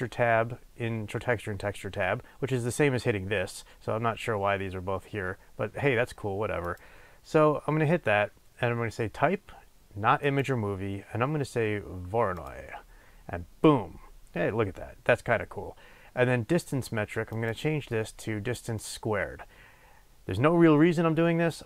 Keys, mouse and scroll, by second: 6.5-21.6 drag.